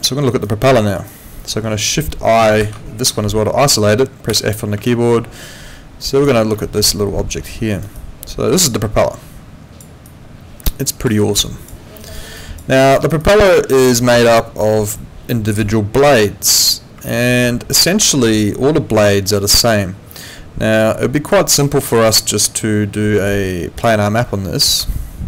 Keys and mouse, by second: 0.0 alt+middle click, 0.3 alt+right click, 0.6 alt+middle click, 0.9 alt+right click, 4.9 alt+click, 6.6 alt+click, 7.4 alt+middle click, 7.7 alt+right click, 7.9 alt+click, 10.0 alt+click, 11.3 alt+click, 12.0 alt+right click, 12.4 alt+click, 12.7 alt+middle click, 13.0 alt+right click, 13.2 alt+click, 15.0 alt+click, 17.0 alt+click, 21.6 alt+click, 23.2 click, 24.9 alt+middle click.